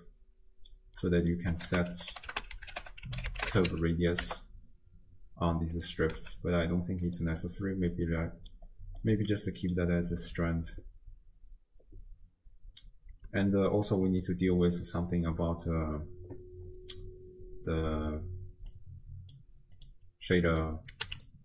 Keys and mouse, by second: 0.1-0.8 drag, 1.0 click, 1.7 ctrl+a, 6.2 x, 7.1 click, 8.0 middle click, 9.2 middle click, 9.4-9.9 drag, 10.4 shift+space, 13.4 space, 14.2 click, 14.4 middle click, 14.4 click, 14.6 middle click, 19.1 click, 19.8-20.6 drag, 21.1 q.